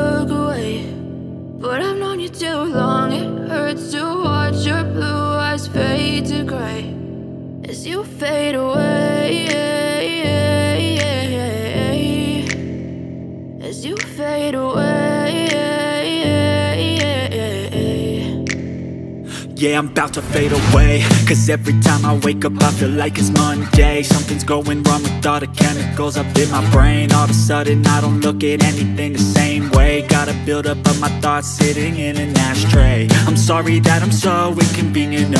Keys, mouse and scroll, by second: 2.1 click, 5.7 click, 11.4 right click, 13.5 click, 16.8 f, 18.0 space, 18.1 click, 18.5 space, 19.3 scroll up 2, 19.8 space, 19.9 click, 20.3 space, 22.9 ctrl+v, 25.6-30.5 alt+shift+drag, 30.5-33.6 drag.